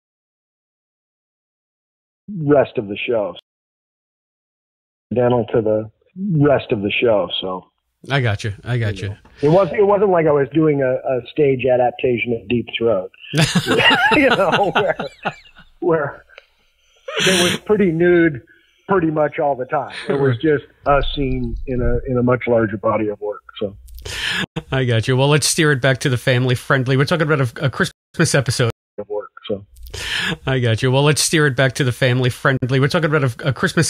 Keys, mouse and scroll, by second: 2.1 click, 2.2 space, 3.3 space, 3.5 click, 3.7 click, 4.9 click, 5.0 space, 9.4-13.3 drag, 14.0 click, 19.8-20.9 drag, 21.3 click, 22.6-24.2 drag, 24.4 Delete, 25.4 click, 26.8 click, 27.6 click, 27.8 space, 28.0 click, 28.0 space, 28.6 space, 28.8 click, 28.9 space, 31.1-32.3 drag, 32.4 Delete, 33.6 click.